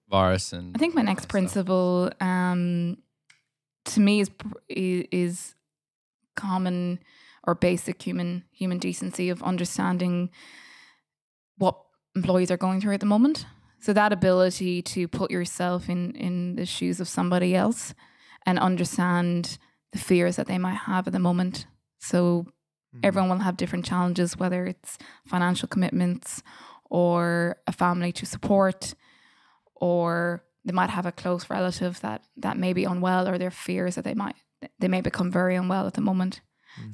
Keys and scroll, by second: 7.4 Delete.